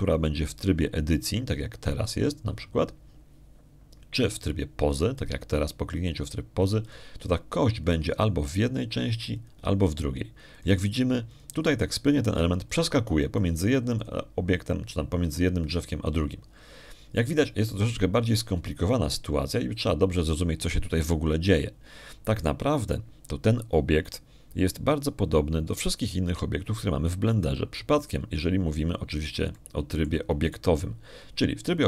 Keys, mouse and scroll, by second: 3.9 click, 6.7 click, 8.7 click, 11.2 click, 12.4 click, 13.2 click, 13.9 click, 14.5 click, 15.3 click, 15.9 click, 17.9 click, 27.3 middle click, 29.0 click, 29.9 click, 31.4 shift+click.